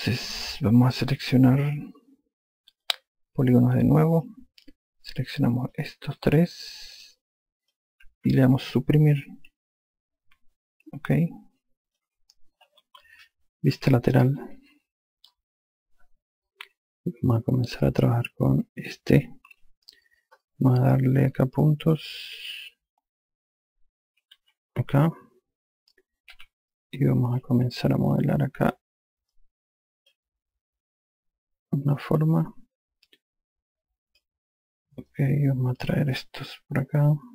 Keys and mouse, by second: 1.3 alt+click, 4.8 click, 6.3 click, 7.6 shift+click, 10.0 Delete, 11.5 alt+click, 14.4 F3, 24.7-25.6 typing, 27.1 5, 27.7 click, 30.1 click, 35.8 click.